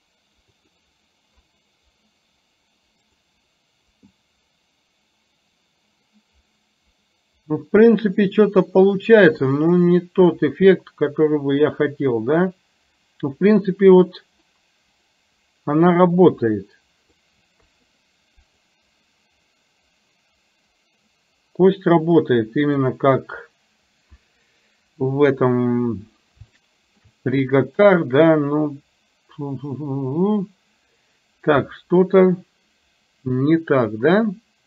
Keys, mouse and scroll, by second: 0.7 click, 3.2 click, 4.2-17.3 drag, 17.7 KP_3, 18.7-22.9 drag, 26.7 shift+middle click.